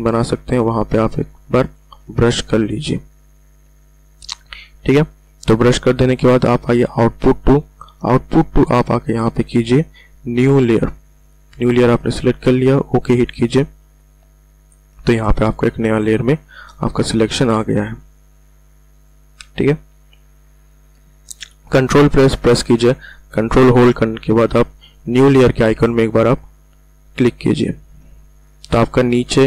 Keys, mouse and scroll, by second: 2.0 ctrl+z, 7.2 click, 11.1 click, 17.7 click, 27.5 ctrl+click.